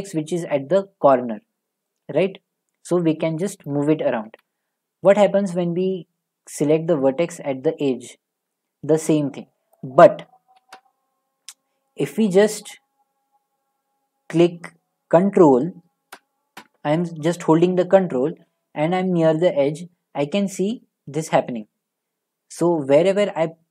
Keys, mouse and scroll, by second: 3.6 click, 4.3 ctrl+z, 9.8 click, 10.6 ctrl+z, 20.9 ctrl+scroll.